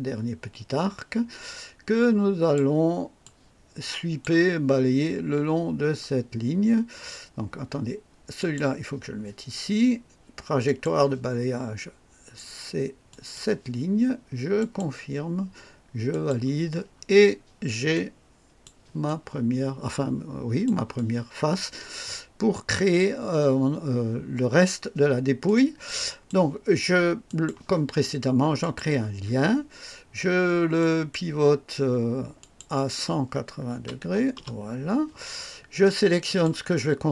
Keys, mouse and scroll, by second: 3.2-4.4 drag, 8.3 click, 10.6 click, 13.0 click, 14.5 click, 16.1 click, 16.9-17.3 scroll down 1, 17.9-18.8 drag, 19.0-20.8 drag, 20.9-23.1 drag, 25.4 click, 25.8 click, 27.2 click, 28.6 click, 30.7 click, 32.3 click, 33.7 KP_1, 34.0 KP_8, 34.3 KP_0, 36.2 click.